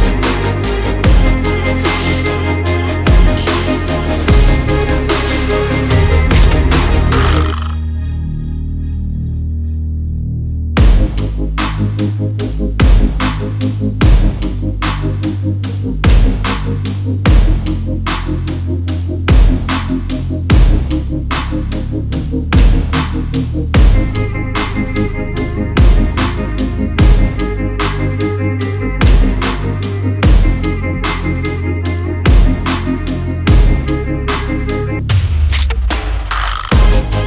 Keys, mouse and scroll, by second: 2.5 shift+z, 4.5 click, 5.7 click, 10.4 shift+z, 27.3 shift+z, 27.7-28.8 right drag, 28.4 s, 28.8-29.6 drag, 34.9 shift+z.